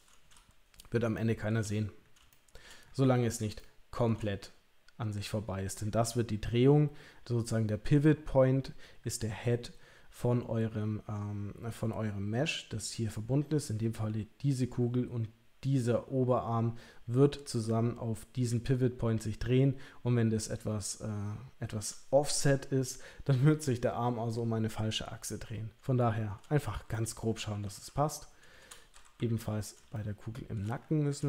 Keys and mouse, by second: 1.1 shift+middle click, 2.3 shift+middle click, 3.6 shift+middle click, 27.0 middle click, 27.5 KP_3, 27.6 KP_1, 29.1 KP_3, 29.9 shift+middle click.